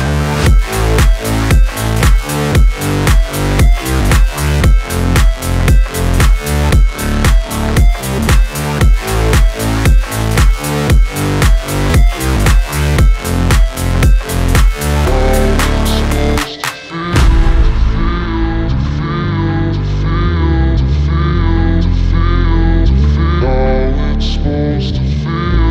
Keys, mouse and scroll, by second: 0.1 ctrl+d, 0.8 ctrl+d, 8.2 click, 10.6 click, 12.8-18.0 typing, 13.4 alt+click, 18.4 click, 20.8 ctrl+d, 21.5-24.3 drag.